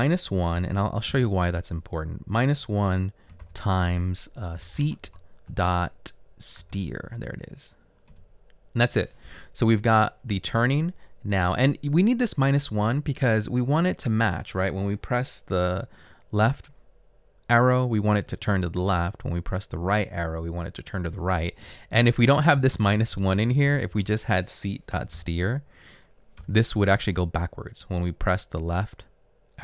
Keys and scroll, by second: 0.7-1.1 typing, 3.4 typing, 4.6-5.5 typing, 6.6 typing, 8.2 Return, 22.6 Left, 23.1 Left, 23.3 Left, 23.9 Left, 25.0 BackSpace, 26.4 BackSpace.